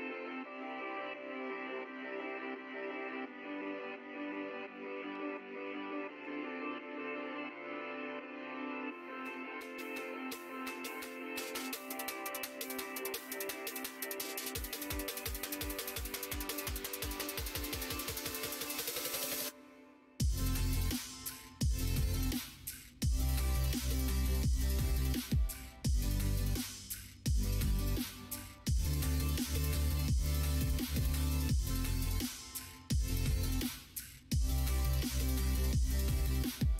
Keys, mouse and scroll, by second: 0.5 click, 1.2 middle click, 2.7 middle click, 3.3 middle click, 4.2 alt+shift+click, 4.7 middle click, 5.5 shift+d, 7.1 click, 10.1 l, 10.6 l, 11.1 l, 12.3 middle click, 12.7 l, 13.1 middle click, 14.1 l, 14.6 l, 14.7 click, 15.8 l, 15.8 3, 16.8 l, 17.3 l, 18.5 l, 19.1 l, 20.7 l, 21.1 middle click, 22.0 l, 22.4 l, 23.4 x, 24.7 middle click, 25.7 1, 26.5 middle click, 27.6 2, 28.2 click, 28.8 shift+click, 29.9 f, 30.9 click, 31.3 f, 31.9 click, 32.2 middle click, 33.1 middle click, 33.7 middle click, 34.9 click, 35.9 1, 36.3 middle click.